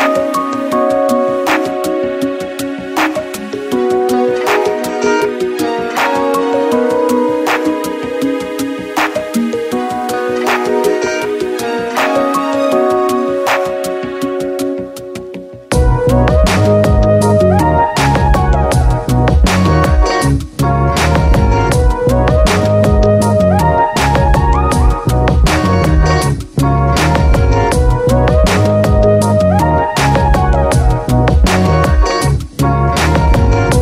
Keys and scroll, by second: 18.5 ctrl+z, 28.6 ctrl+j.